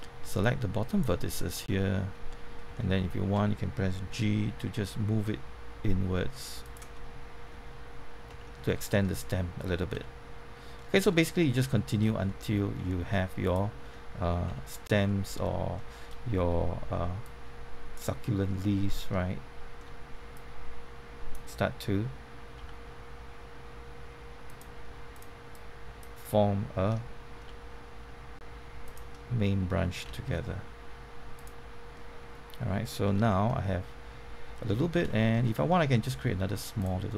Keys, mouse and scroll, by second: 1.6 middle click, 4.2 shift+g, 6.6 click, 6.9 middle click, 8.2 Tab, 8.6 scroll down 1, 8.8 middle click, 9.9 z, 10.7 middle click, 11.1 scroll down 1, 11.4 middle click, 11.9-12.3 scroll up 1, 12.3 middle click, 13.4 click, 14.4 Tab, 15.0 middle click, 17.2-18.6 drag, 18.9 middle click, 20.3-21.6 drag, 22.5 g, 24.4-26.6 drag, 26.8 middle click, 27.4 g, 28.8 click, 29.0 middle click, 30.0 z, 31.3 click, 31.9 middle click, 33.2 Tab, 33.4 middle click, 34.8 scroll up 1, 35.0 shift+middle click, 36.8 click.